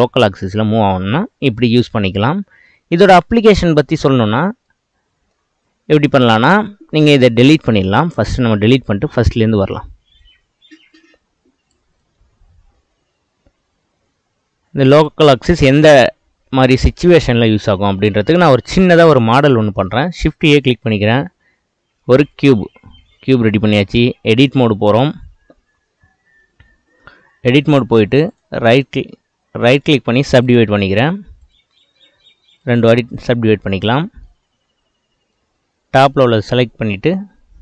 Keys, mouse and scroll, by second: 4.7-7.7 middle drag, 7.7 x, 10.2-15.0 drag, 15.7 Tab, 17.2 click, 17.5-19.1 middle drag, 19.1 click, 20.1 shift+a, 23.0-23.9 middle drag, 23.9 Tab, 28.3-31.4 right drag, 31.4-33.2 drag, 33.6-35.3 middle drag, 35.3 click.